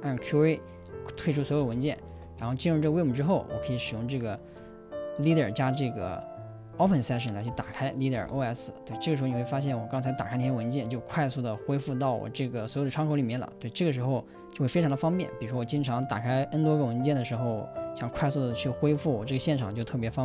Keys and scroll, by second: 0.4 Return, 1.4-2.4 typing, 7.7-9.0 typing.